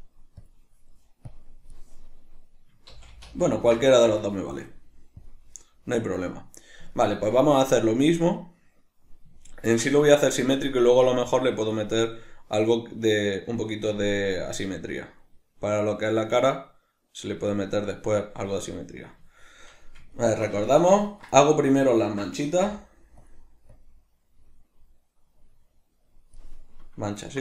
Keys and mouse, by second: 2.9 ctrl+z, 2.9-7.0 drag, 7.0-23.7 ctrl+middle drag, 22.7 f, 23.7-27.4 drag.